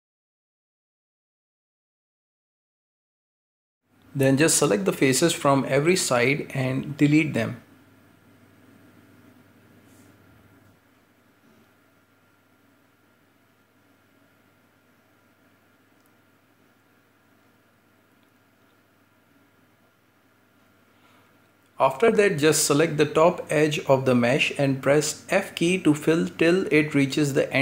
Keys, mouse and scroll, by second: 0.2 shift+middle click, 1.5 scroll down 11, 1.7 shift+middle click, 1.8-4.2 scroll up 2, 4.2 right click, 4.6-5.0 shift+middle drag, 5.0 c, 9.4-10.9 middle drag, 10.9 c, 13.1 middle click, 13.8 c, 14.6-15.9 middle drag, 15.9 c, 18.6-19.6 middle drag, 19.6 x, 21.0 middle click, 21.8-22.2 scroll up 2, 22.2 middle click, 22.6-23.7 scroll up 1, 23.7-24.7 drag, 24.7 right click, 25.3-27.6 typing, 27.0-27.3 scroll down 3, 27.3 shift+middle click.